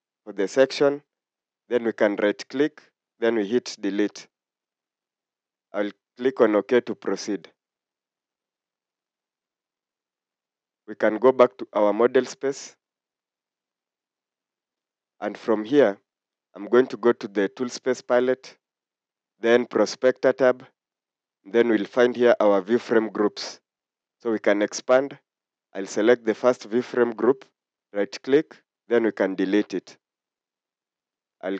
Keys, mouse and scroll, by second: 2.1 right click, 27.6 right click.